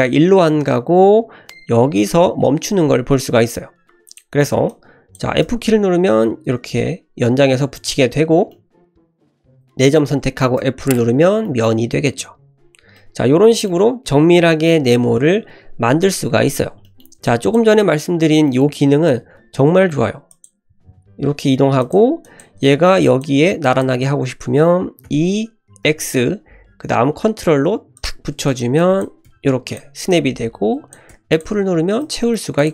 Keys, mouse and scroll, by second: 4.1 click, 4.7 click, 5.4 f, 7.8 click, 8.3 scroll down 2, 8.5 middle click, 9.1 click, 10.6 f, 11.4 shift+middle click, 12.1 click, 13.0 middle click, 16.8 shift+middle click, 17.2 click, 17.8 scroll up 1, 18.5 shift+middle click, 18.9 e, 20.7 e, 22.2 click, 23.0 click, 23.6 click, 25.1 e, 28.5 click, 28.8 click, 29.3 f, 29.7 click, 30.1 click, 31.1 f, 31.3 click, 31.6 Tab, 32.0-32.3 middle drag, 32.6 click.